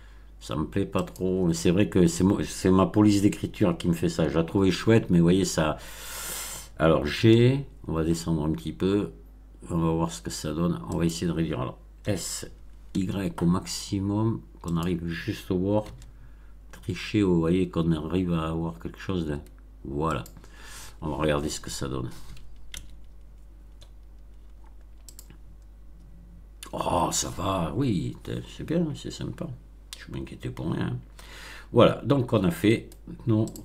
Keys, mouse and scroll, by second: 0.9 click, 7.1 g, 10.9 click, 11.9 s, 12.8 y, 14.6 click, 15.8 g, 20.1 click, 22.6 Tab, 24.2-24.6 scroll down 2, 25.0 click, 32.7 right click, 33.4 click.